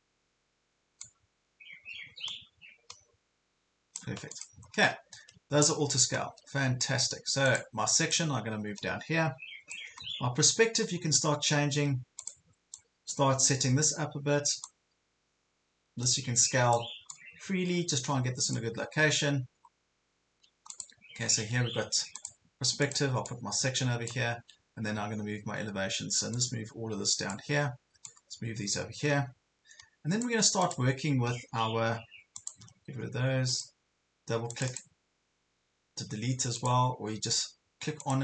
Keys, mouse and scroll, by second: 1.0-4.0 drag, 4.4 click, 4.7 ctrl+scroll down 1, 6.2 ctrl+scroll up 1, 7.5-10.0 drag, 10.0 ctrl+scroll up 1, 10.8-11.4 scroll down 2, 12.2-18.7 drag, 19.0 scroll down 1, 19.7 ctrl+scroll down 1, 20.7 click, 21.3 ctrl+scroll down 1, 22.3 click, 24.3 ctrl+scroll down 1, 24.9-25.5 scroll up 2, 26.5-31.7 drag, 32.6 Delete, 33.5-37.7 drag.